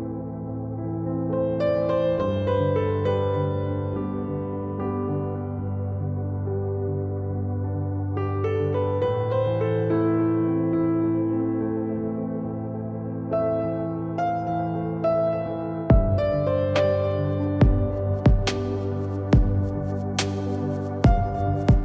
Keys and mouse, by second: 2.1 KP_7, 3.0 z, 3.3 z, 7.5 z, 9.7-10.0 drag, 10.0 z, 10.8 s, 11.8 z, 12.1-13.5 drag, 13.9 r, 21.4 drag.